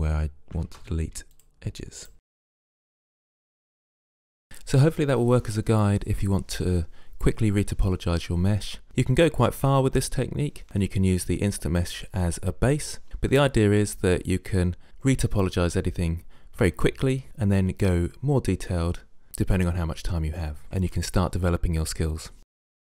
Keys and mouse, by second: 0.7 ctrl+Tab, 2.2 Delete, 2.8 middle click, 2.9 ctrl+Tab, 3.3 click, 3.4 g, 3.5 click, 3.8 g, 4.0 g, 4.0 middle click, 4.1 click, 4.3 Tab, 4.3 Tab, 4.5 click, 5.4 middle click, 6.2 middle click, 7.0 ctrl+r, 8.1 click, 8.2-10.2 middle drag, 10.6 middle click, 10.7 ctrl+r, 10.8 click, 11.3 ctrl+r, 11.9 click, 12.4 click, 12.5 g, 12.7 g, 12.9 g, 13.2 g, 13.3 Tab, 13.4 Tab, 13.7 click, 14.2 Delete, 14.6 Delete, 15.2 Delete, 15.5 click, 15.9 right click, 16.1-17.0 typing, 16.3 click, 17.1 middle click, 17.4 middle click, 17.8 middle click, 18.2 middle click, 18.5 click, 18.8 Delete, 20.1 middle click, 20.6 click, 20.8 k, 21.5 middle click.